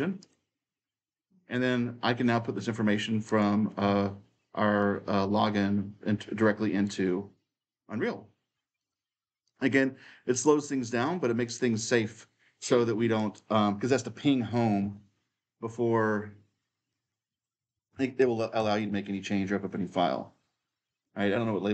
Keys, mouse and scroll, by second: 0.0-2.1 drag, 3.0 click, 4.7-6.6 drag, 6.6-8.6 right drag, 8.6-14.1 drag, 14.6 ctrl+v, 16.7-17.7 drag, 17.4-18.9 typing, 20.6-21.7 drag, 21.5-21.7 typing.